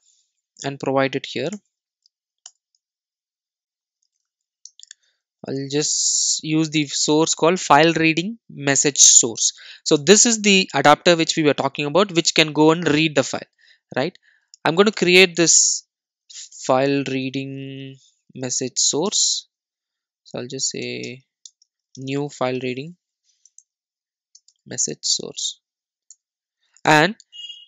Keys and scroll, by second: 1.5 alt+Return, 10.1 Return, 18.8 Return.